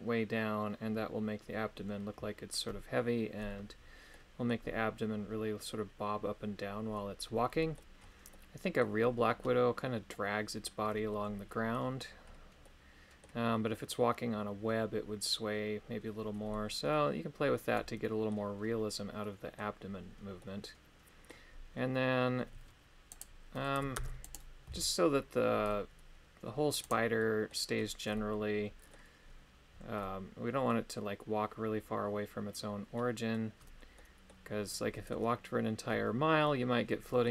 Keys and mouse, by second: 4.1 middle click, 7.6 middle click, 8.3 middle click, 9.4-11.7 middle drag, 12.6 middle click, 16.5-18.3 middle drag, 19.2 middle click, 20.3 middle click, 23.1 right click, 23.9 ctrl+Tab, 24.2 right click, 24.6 g, 27.1 middle click, 28.1 middle click, 30.0 middle click, 32.9 middle click, 33.9 middle click, 34.9 middle click, 36.4 middle click.